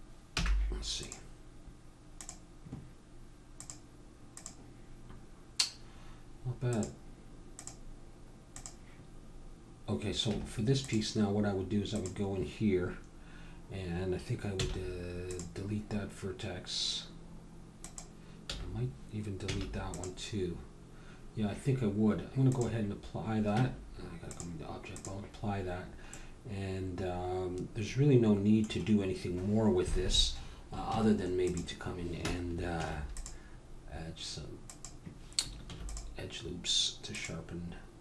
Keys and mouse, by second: 0.3 n, 1.0 click, 2.6 click, 3.6-5.5 drag, 6.7-10.8 drag, 10.3 Tab, 11.9-13.8 drag, 14.6 x, 17.8-19.6 drag, 19.4 x, 22.5-24.4 drag, 23.6 Tab, 25.0-26.2 drag, 26.2-27.8 middle drag, 28.2-32.2 middle drag, 30.9 Tab, 32.7 ctrl+r, 35.7 ctrl+r.